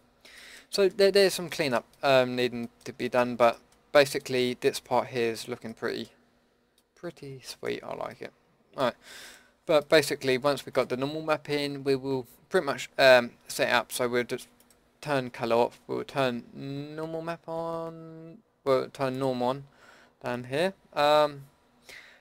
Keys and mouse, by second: 10.8-22.2 drag.